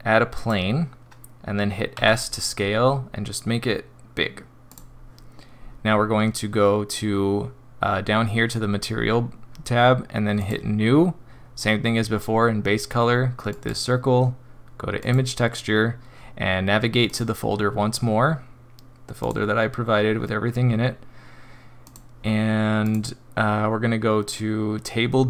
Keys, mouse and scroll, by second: 1.9 s, 10.4 click, 13.5 click, 17.0 click.